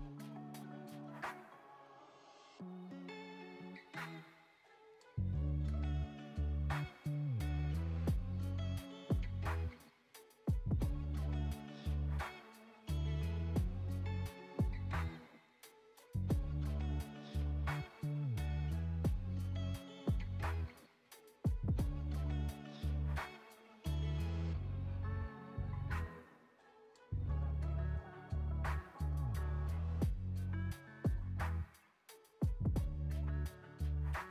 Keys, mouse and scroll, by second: 2.1 right click, 2.6 click, 3.1 middle click, 3.7 click, 7.3-9.5 drag, 9.5-12.5 middle drag, 14.8-18.2 middle drag, 18.2-21.0 drag, 22.2 BackSpace, 23.0 click, 23.6 Delete, 24.5 click, 25.1 ctrl+c, 25.2 ctrl+v, 25.8 click, 27.9-29.9 middle drag, 30.9-31.9 middle drag, 31.9 click.